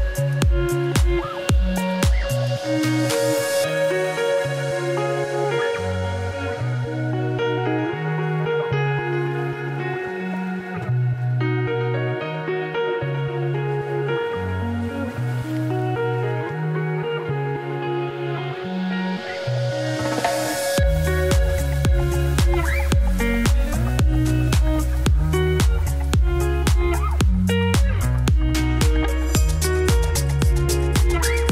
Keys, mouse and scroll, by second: 0.8 Tab, 2.1 a, 6.6 middle click, 7.1 2, 8.6 ctrl+alt+Left, 9.2-12.1 middle drag, 12.1 KP_Divide, 17.1 ctrl+shift+t, 19.3-20.4 drag, 20.4 a, 24.9 click, 25.4 middle click, 25.8 z, 26.0-27.2 shift+middle drag, 27.2 click, 27.9 click, 29.5 middle click, 30.4 click, 31.1-31.5 scroll up 3.